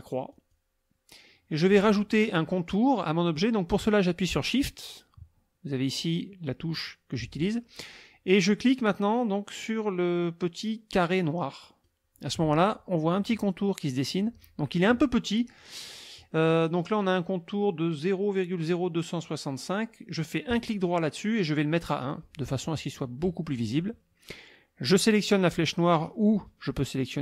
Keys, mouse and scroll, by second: 0.3 click, 11.6 shift+click, 20.5 click, 22.0 click.